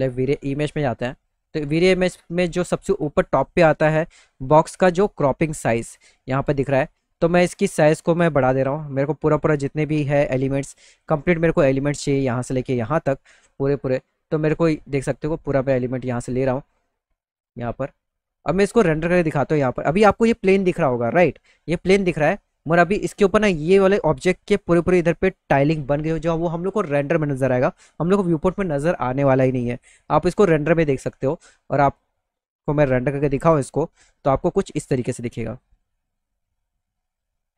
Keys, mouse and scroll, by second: 0.3 click, 2.9 click, 6.5 click, 8.0 click, 9.2-10.5 drag, 10.9 alt+middle click, 12.9 alt+middle click, 14.5-15.6 drag, 16.3-17.4 drag, 17.8 alt+middle click, 18.5 middle click, 19.1 middle click, 19.4 alt+middle click, 21.1 middle click, 22.1 middle click, 22.5 middle click, 22.9 middle click, 29.6 middle click, 30.1 middle click, 30.8 middle click, 32.3 ctrl+alt+middle click, 32.5-34.1 middle drag, 35.3 click.